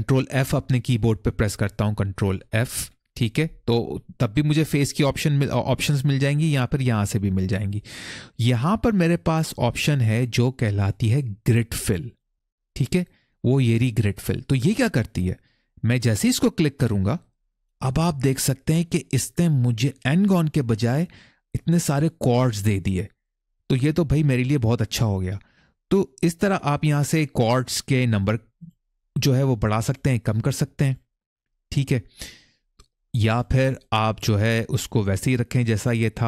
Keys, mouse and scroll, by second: 2.4 ctrl+f, 7.0-11.5 drag, 11.8-16.8 drag, 21.8 middle click, 27.9 click, 28.3 click, 28.9 click, 29.6 click, 30.1 click, 30.6 click, 31.0 click, 32.8 click, 33.1 click, 33.4 click, 33.6 click, 33.8 click, 36.1 click.